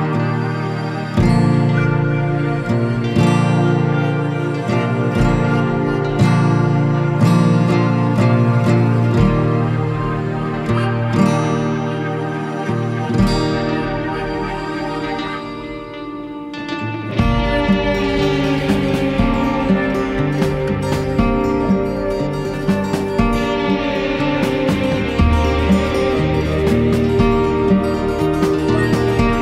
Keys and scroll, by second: 5.5 ctrl+c, 6.3 ctrl+z, 7.6 ctrl+v, 13.9 Down, 17.0 ctrl+=, 17.9 space, 27.8 ctrl+z.